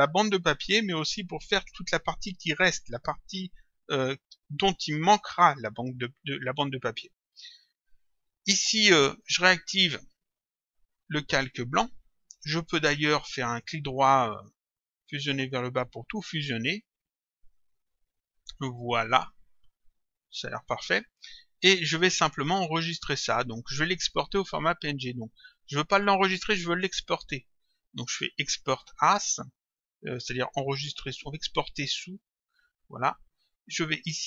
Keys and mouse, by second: 8.1 click, 10.5 click, 13.5 right click, 15.5 click, 17.8 click, 25.2 click, 32.3 click, 34.1 click.